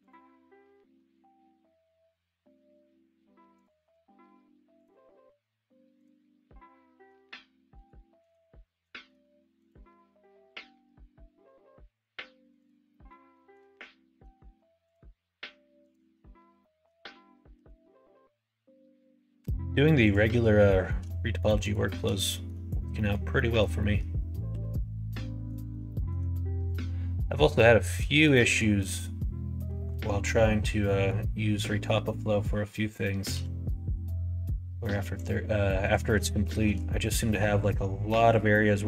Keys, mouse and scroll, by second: 0.9 r, 3.9 s, 5.2 g, 7.1 alt+space, 8.2 click, 8.8 shift+middle click, 9.6 ctrl+click, 10.4 g, 12.8 middle click, 13.3 middle click, 14.8 click, 15.8 ctrl+click, 16.6 shift+middle click, 17.5 g, 20.6 shift+click, 21.6 click, 22.2 shift+middle click, 22.9 middle click, 23.3 middle click, 23.7 middle click, 24.5 g, 25.9 click, 26.6 click, 28.2 shift+middle click, 30.8 middle click, 32.0 middle click, 32.6 middle click, 33.3 g, 35.8 click, 36.4 shift+middle click, 37.2 1, 38.0 middle click.